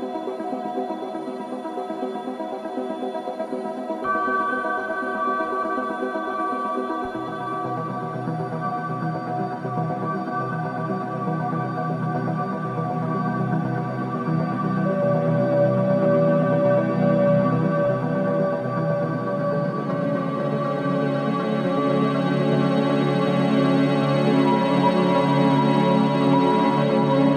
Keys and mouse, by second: 5.6 click, 6.7-7.2 middle drag, 7.4 Tab, 8.0-8.9 middle drag, 9.1-10.7 middle drag, 11.1 click, 11.6 Tab, 12.4 click, 13.4-16.6 middle drag, 17.1 click, 18.4-18.8 middle drag, 19.2 click, 19.7 click, 21.1 middle click, 22.0 s, 26.4 Tab, 26.9 middle click.